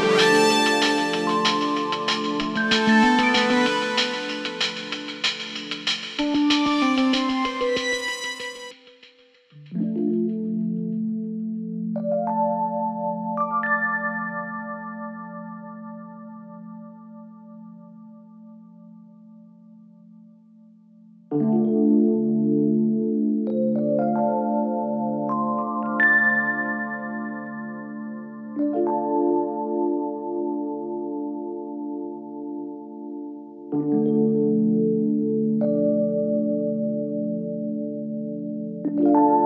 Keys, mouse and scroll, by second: 14.8 click, 16.8 alt+Num_Lock, 17.0 alt+[, 18.6-19.9 click, 30.4-31.7 click, 37.9 alt+[, 38.5-39.4 click.